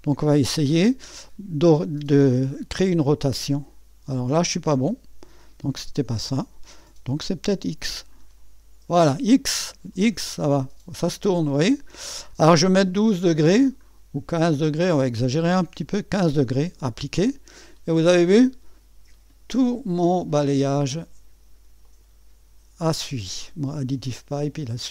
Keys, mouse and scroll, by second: 3.2-4.7 scroll down 1, 6.3 click, 7.2 click, 8.1-8.4 scroll down 1, 16.8 click, 21.8 click.